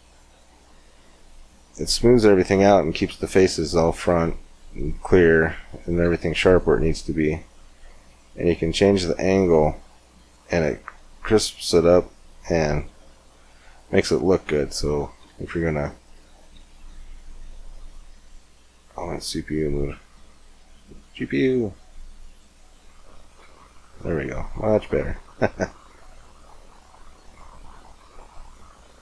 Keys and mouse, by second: 17.2 shift+z, 24.3 middle click, 24.9 Tab, 25.2-27.6 middle drag, 28.0 middle click, 28.1-29.0 drag.